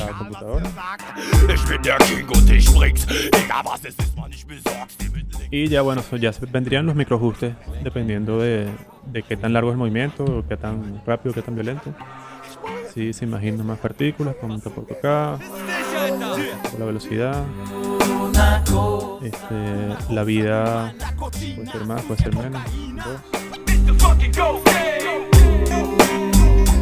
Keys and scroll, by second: 4.1 space, 10.2 v, 22.1 2, 22.3 Return.